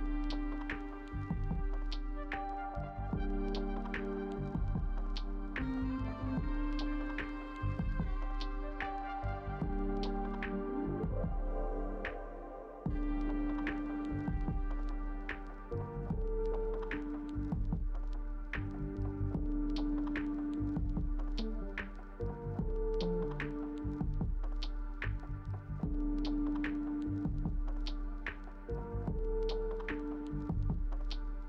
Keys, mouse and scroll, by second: 11.4 double click, 17.8 ctrl+space, 19.4 space, 22.6 ctrl+space.